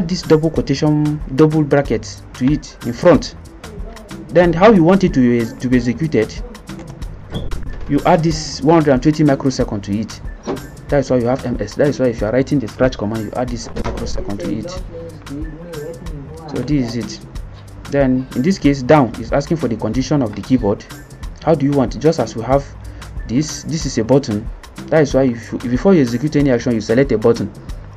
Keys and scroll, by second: 6.8 Return, 16.5-17.3 typing.